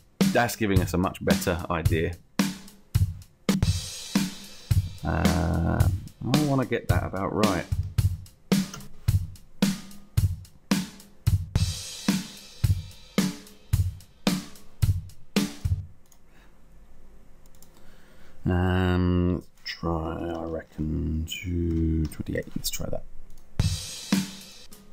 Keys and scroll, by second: 7.2 2, 7.4 3, 8.1 8, 8.6 BackSpace, 9.2 Return, 20.1 2, 22.0 8.